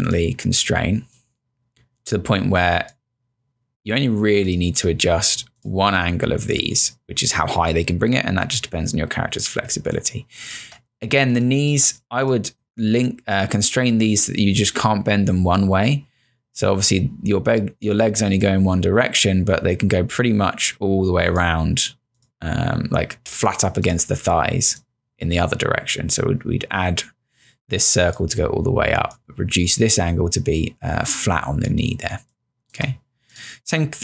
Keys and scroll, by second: 9.7 space, 32.2 space.